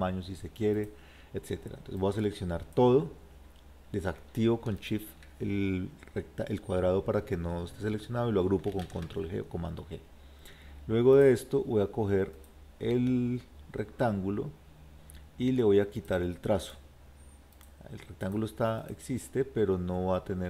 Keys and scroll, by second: 8.8 ctrl+g.